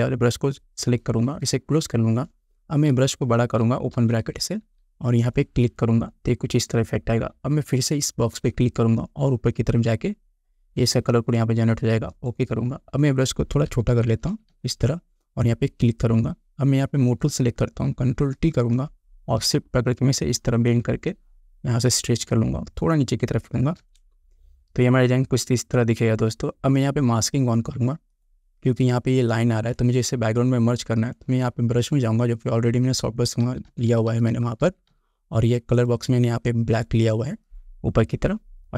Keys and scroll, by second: 3.1 ], 13.9 [, 18.4 ctrl+t, 24.0 Return, 33.7 [.